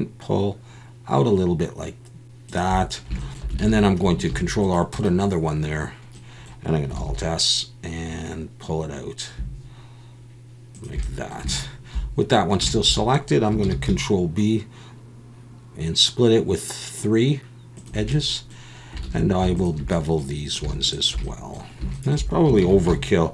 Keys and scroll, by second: 3.6 alt+a, 4.3 ctrl+r, 7.0 alt+s, 13.6 ctrl+b, 19.0 alt+a, 22.6 ctrl+b.